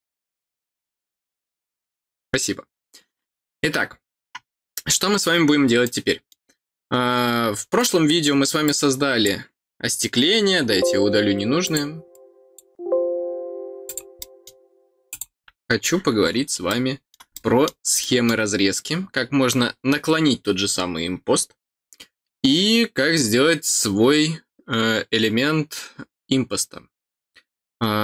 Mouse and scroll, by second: 5.8 middle click, 6.7-7.1 scroll down 2, 7.7 middle click, 8.6 click, 11.6 click, 12.1 click, 13.8 click, 14.1 middle click, 15.1 click, 16.0 middle click, 16.6 middle click, 17.3 middle click, 18.0 middle click.